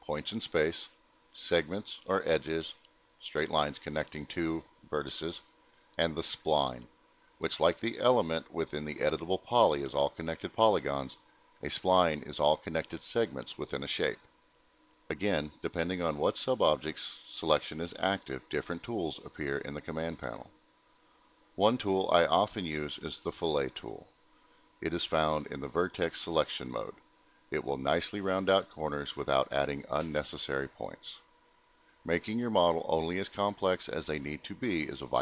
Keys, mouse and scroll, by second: 0.5 click, 1.3 click, 1.5 click, 2.7 click, 3.9 click, 5.3 click, 6.4 click, 9.3 click, 14.2 click, 20.0 click, 21.9 click, 27.0 click, 28.6 click, 32.6 right click, 34.1 click.